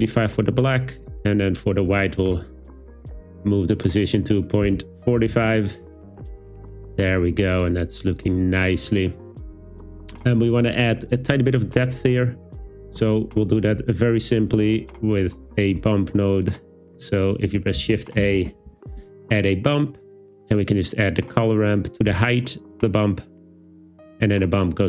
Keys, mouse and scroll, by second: 1.0 click, 1.6 click, 4.0-5.5 drag, 15.3 click, 17.2 click, 17.8 shift+a, 20.5 click, 21.8 click, 24.7 click.